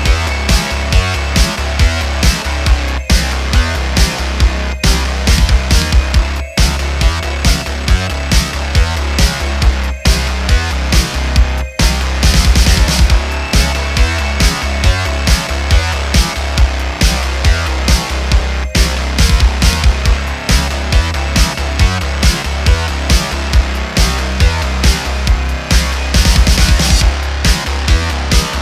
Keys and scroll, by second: 9.0 ., 16.5 shift+d, 17.6 z, 18.5 s, 27.1 ..